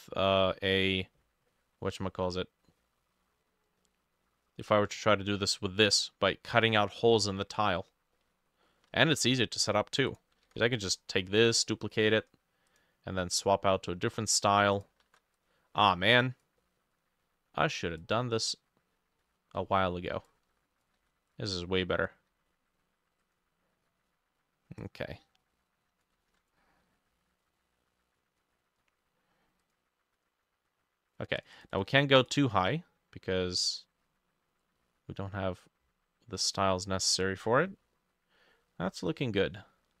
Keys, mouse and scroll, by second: 1.6 middle click, 2.8 middle click, 3.5 scroll down 1, 3.8 middle click, 5.0 middle click, 7.6-8.2 scroll down 6, 8.7 middle click, 8.9-9.7 scroll up 8, 10.5 ctrl+d, 13.7 middle click, 14.2-14.9 scroll down 3, 15.1 ctrl+d, 16.6 middle click, 19.3-24.1 drag, 19.3 middle click, 19.6-20.9 scroll up 3, 21.0 ctrl+middle click, 21.0 ctrl+d, 26.3 ctrl+d, 26.3-30.3 drag, 26.3 middle click, 31.4 double click, 31.6 double click, 31.8 double click, 32.2 double click, 37.0-37.7 scroll down 6, 37.7 middle click, 38.5 middle click, 38.7-40.0 scroll up 6.